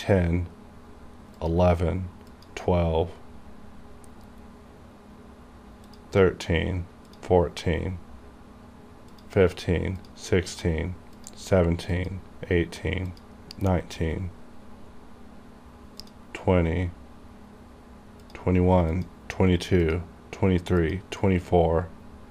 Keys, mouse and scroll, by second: 3.8 scroll down 1, 6.0 click, 16.1 click, 17.3 scroll down 1, 18.3 click, 21.8 scroll down 1.